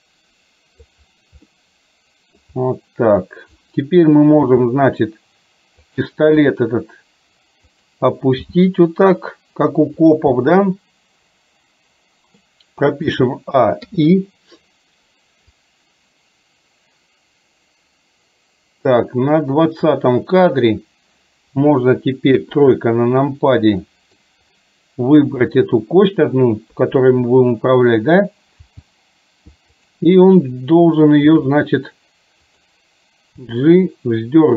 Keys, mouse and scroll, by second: 1.5-2.5 middle drag, 4.5 g, 6.5 r, 8.5 g, 10.5-12.5 middle drag, 13.1 a, 13.9 i, 15.6-20.5 drag, 22.4 KP_3, 24.0 middle click, 25.5 click, 26.8 KP_3, 28.8 g, 31.4 r, 33.5 g.